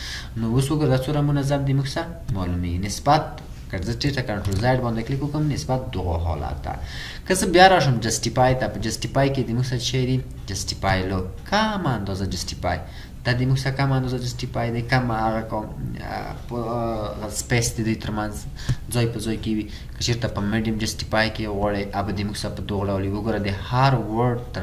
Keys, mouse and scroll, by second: 4.5 ctrl+z.